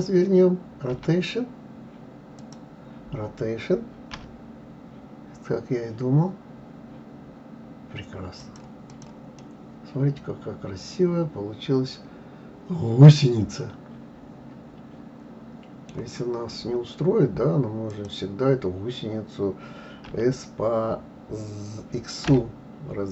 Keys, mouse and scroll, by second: 0.9 r, 2.4 click, 4.1 r, 8.9 click, 9.4-12.4 middle drag, 16.3-16.6 scroll up 1, 17.9 click, 20.1 s.